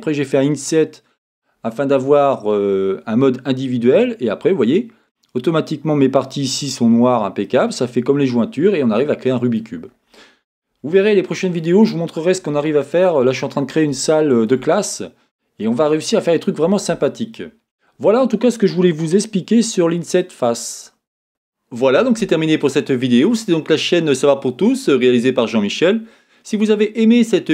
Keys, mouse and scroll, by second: 4.1-7.0 scroll up 2, 7.0-7.5 scroll up 1, 7.5-7.9 scroll down 2, 9.9-11.1 scroll down 2, 13.4-14.1 scroll down 2.